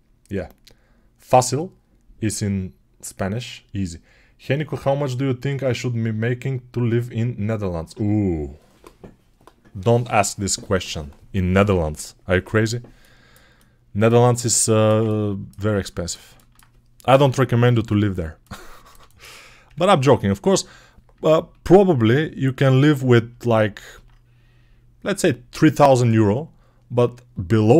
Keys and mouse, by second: 11.6 Home, 13.8-27.7 ctrl+alt+shift+middle drag, 17.1 Home, 19.5 KP_Decimal.